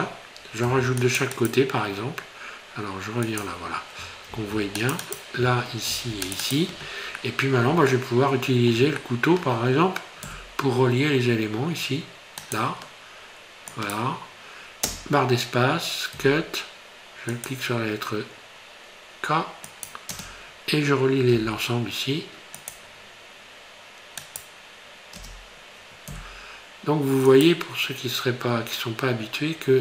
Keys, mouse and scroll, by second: 0.6 ctrl+r, 3.5 click, 4.3 ctrl+r, 5.9 ctrl+r, 7.2 middle click, 7.9 shift+middle click, 9.0 middle click, 10.3 k, 16.2 k, 21.3 k, 26.1 k.